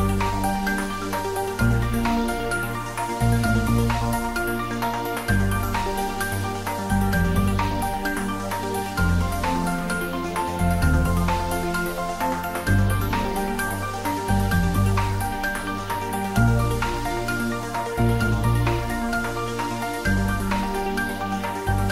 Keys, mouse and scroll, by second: 2.7 click, 3.3-3.7 middle click, 4.2-5.6 typing, 4.6 click, 5.4 click, 6.1 ctrl+middle click, 6.9 click, 7.4-7.8 middle click, 8.0 ctrl+middle click, 8.4 middle click, 8.9 click, 13.1-16.4 drag, 18.8-20.2 typing, 19.8 click, 20.7 click.